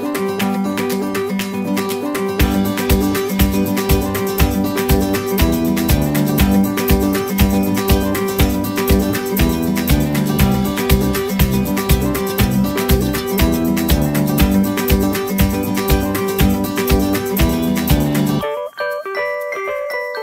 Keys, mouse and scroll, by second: 0.7-2.1 typing, 4.2-5.7 typing, 6.7 scroll up 1, 10.6-12.0 typing, 14.3-15.8 typing, 17.5 Escape, 17.8 space, 17.9 Escape, 19.7 double click.